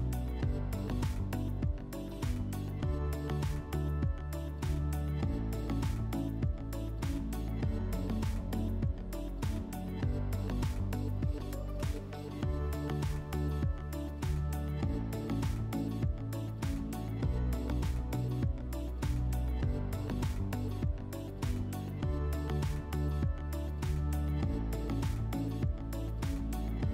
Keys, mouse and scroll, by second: 0.6-2.1 drag, 2.1 click, 4.1 click, 6.4 click, 9.3 click, 10.8 click, 16.8 click, 19.2 click, 20.4 click.